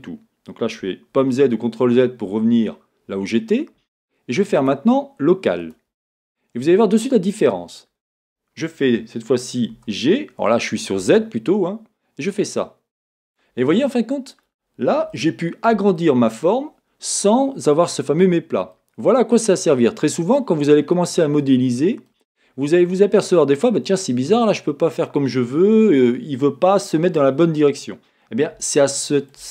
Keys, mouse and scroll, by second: 1.2 z, 4.6-6.6 drag, 6.6-13.0 middle drag, 9.7 g, 13.4 click, 13.9-16.0 middle drag, 16.6-29.5 middle drag, 20.8-21.4 scroll down 2.